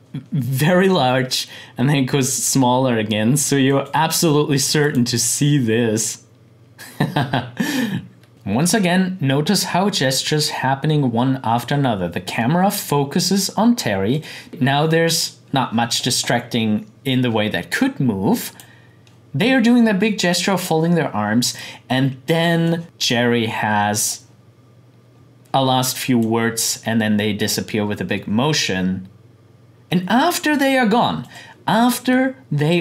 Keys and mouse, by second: 3.7 click, 14.1 click, 18.4 click, 21.6-27.3 drag, 31.2-32.8 drag.